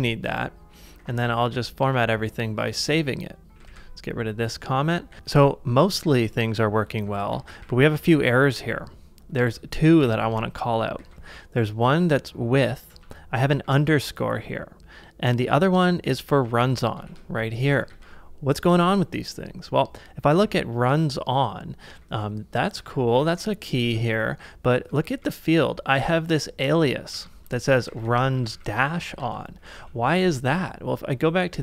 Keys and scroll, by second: 0.7-1.6 typing, 3.5 typing, 5.1 shift+], 6.2-8.1 typing, 10.1-11.5 typing, 12.6-14.0 typing, 15.2-17.6 typing, 18.0 ctrl+c, 18.9 shift+6, 20.3 shift+3, 21.9-23.8 typing, 23.8 ctrl+c, 25.1-29.1 typing, 29.2 ctrl+c, 29.7 super+Tab.